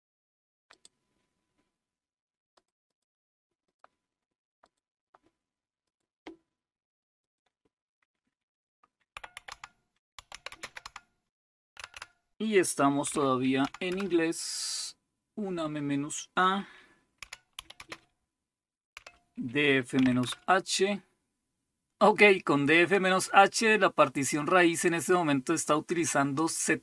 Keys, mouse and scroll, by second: 0.7 click, 2.6 click, 2.9 click, 3.7 click, 4.6 click, 5.8 click, 7.2 click, 8.9-11.9 typing, 13.0-13.9 typing, 17.2-17.8 typing, 18.9-19.9 typing, 20.2 Return, 21.8-26.8 drag.